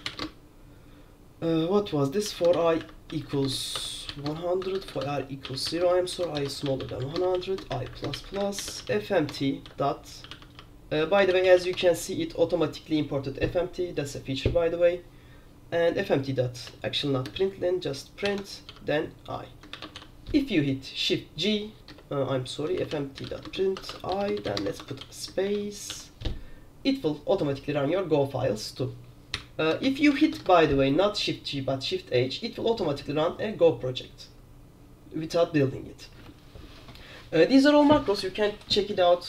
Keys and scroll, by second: 0.0-0.7 typing, 2.1-11.1 typing, 9.4 Tab, 11.4 ctrl+j, 11.5 ctrl+j, 11.7 ctrl+j, 11.8 Tab, 16.8-20.6 typing, 18.5 Escape, 22.0 Return, 22.1-26.3 typing, 29.2-30.8 typing.